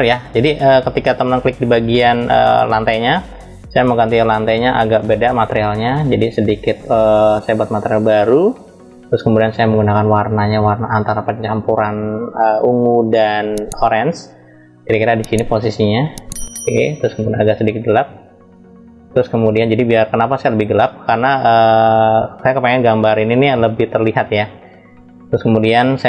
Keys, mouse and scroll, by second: 2.7 click, 6.8 click, 9.7 drag, 12.5 click.